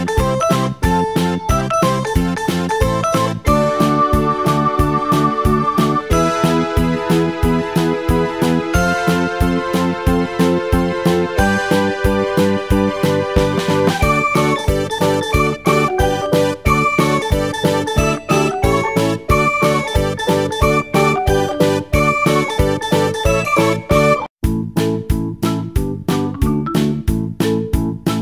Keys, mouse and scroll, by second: 4.0-5.1 shift+middle drag, 5.1-5.9 scroll up 2, 7.3 click, 19.1-21.5 drag.